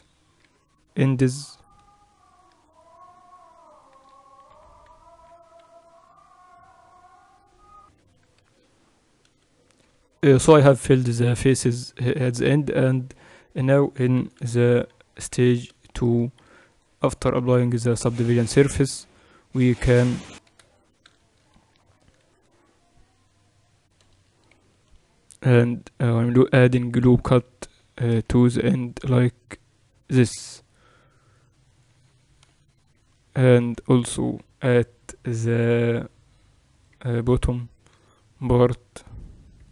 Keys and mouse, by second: 0.5 f, 2.4-8.0 right drag, 4.6 f, 11.9-15.5 middle drag, 14.7 t, 15.5 Tab, 16.7 ctrl+r, 22.4 ctrl+r, 25.2 ctrl+r, 28.4-32.5 middle drag, 29.3 ctrl+r, 32.7-36.0 middle drag, 34.7 ctrl+r, 38.3 ctrl+r.